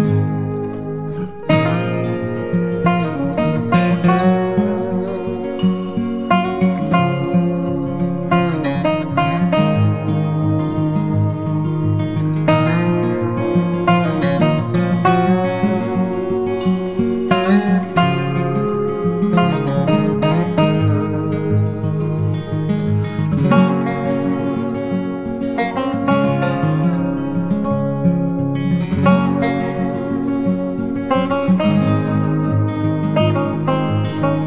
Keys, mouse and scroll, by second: 0.8 right click, 2.9 double click, 14.5 right click, 18.2 double click, 19.2 typing, 19.5 double click.